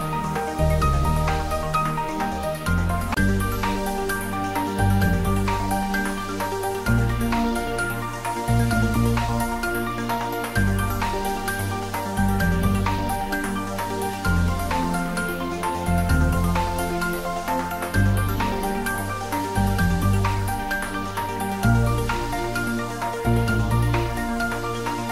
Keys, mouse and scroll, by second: 0.0 click, 0.3 ctrl+s, 0.6 ctrl+middle click, 1.2-2.5 middle drag, 2.5 click, 3.2 Tab, 4.6 a, 6.5-7.3 typing, 9.4 click, 9.6 Tab, 10.3 g, 11.0 x, 11.2 BackSpace, 14.3 BackSpace, 15.0 Return, 16.3 click, 17.9 g, 18.3 y, 18.5 Left, 20.0 Return, 20.3 ctrl+s, 20.7 ctrl+middle click, 21.9 shift+z, 22.3-25.1 middle drag.